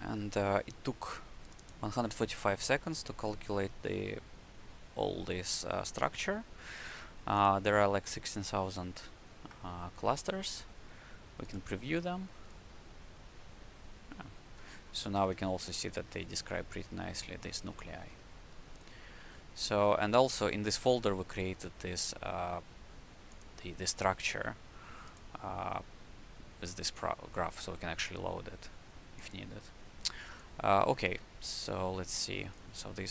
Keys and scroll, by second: 15.0 w, 17.7 q, 19.1 shift+c.